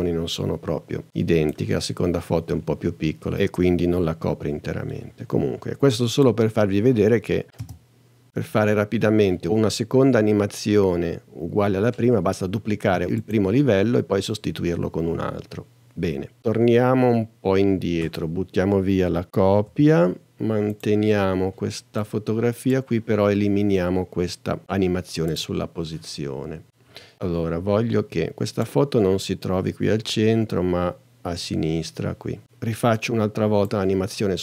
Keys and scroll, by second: 7.6 space, 13.4 space, 19.6 BackSpace.